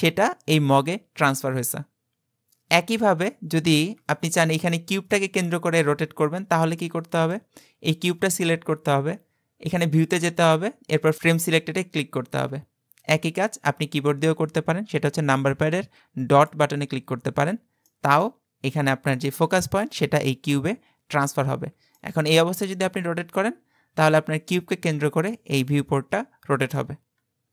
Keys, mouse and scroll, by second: 3.3-4.6 scroll down 13, 4.6 click, 5.2-6.1 middle drag, 6.1-6.8 scroll down 5, 6.8-9.7 shift+middle drag, 9.7-11.2 drag, 17.5-17.9 scroll down 2, 17.9-19.8 middle drag, 19.8 KP_Decimal, 21.6-22.0 scroll down 4, 22.0-25.1 middle drag.